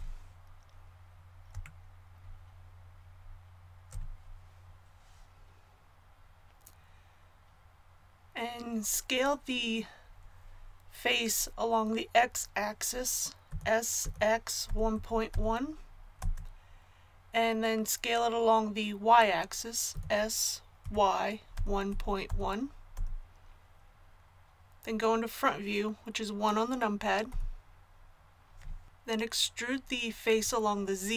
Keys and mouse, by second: 13.5 s, 19.9 s, 27.3 KP_1.